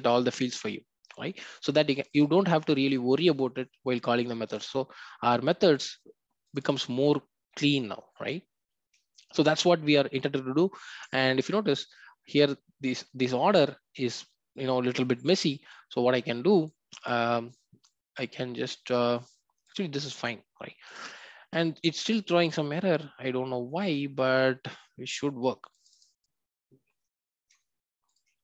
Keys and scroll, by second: 4.5 ctrl+b.